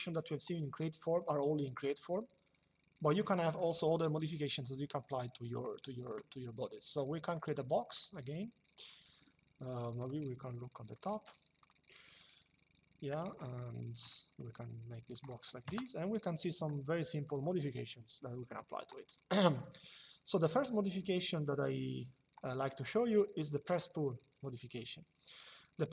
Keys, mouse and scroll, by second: 7.0 click, 9.7 click, 13.3 shift+middle click, 14.1 click, 15.4 KP_Enter, 18.2 click.